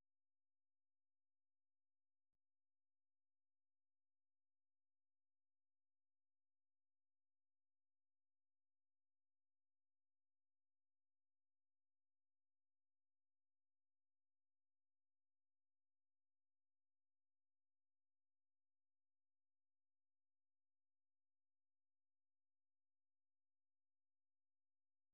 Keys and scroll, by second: 21.5 super+2.